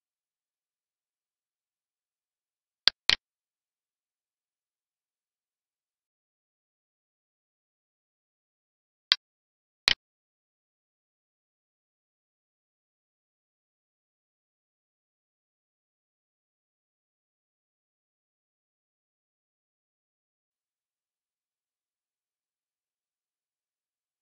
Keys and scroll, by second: 4.6 ctrl+s, 6.2 alt+e, 20.1 alt+e, 22.4 alt+Tab.